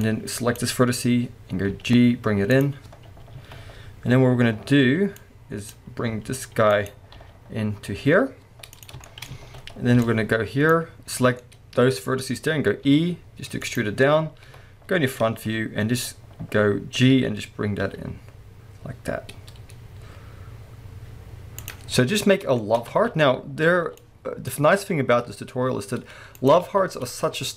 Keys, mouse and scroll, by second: 0.0 click, 1.7 g, 2.6 click, 3.3 alt+a, 6.8 right click, 7.2 g, 8.8 click, 9.0-13.8 shift+middle drag, 9.4 alt+a, 12.8 e, 13.8 click, 14.5 KP_1, 17.2 g, 21.7 click, 21.9-22.6 scroll down 1, 22.6-24.7 shift+middle drag, 22.8 scroll up 2, 22.9 alt+a, 24.7-25.2 scroll up 1, 25.2-26.5 middle drag, 25.2 g, 26.5 click, 26.6 alt+a, 26.9 scroll up 1.